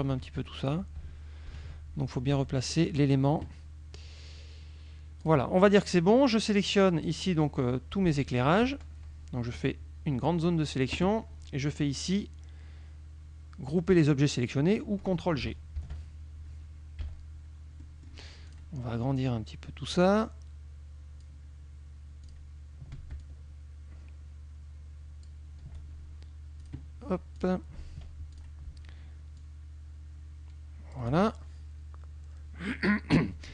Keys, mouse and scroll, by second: 1.6 ctrl+KP_5, 2.6 click, 5.3 click, 5.8-7.3 drag, 8.4 shift+click, 9.7-11.0 drag, 15.9 ctrl+g, 17.1 KP_Subtract, 17.9 click, 18.6 click, 20.2-21.5 drag, 22.4 click, 23.3-25.5 ctrl+shift+drag, 26.7 click, 27.4 click, 28.4 ctrl+shift+click, 29.4-31.2 ctrl+shift+drag.